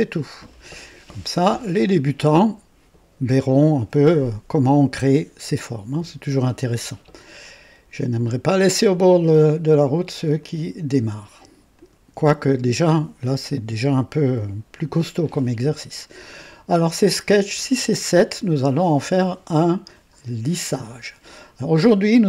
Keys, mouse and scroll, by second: 10.3 click, 11.8 ctrl+click.